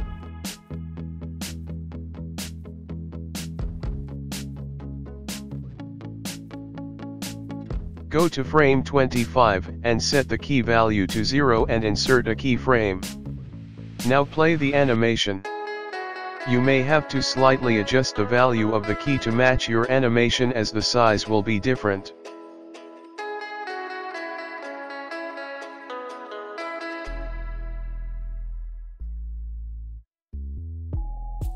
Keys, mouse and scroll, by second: 0.7 i, 2.4 click, 6.7 click, 12.6 click, 17.2 i, 18.2 click, 18.7 space, 19.6 space, 20.4 click, 23.9-24.4 scroll down 4, 24.4 shift+middle click, 24.9-25.2 scroll up 2, 25.2 shift+middle click, 25.6 click, 25.8 ctrl+z, 25.8 ctrl+z.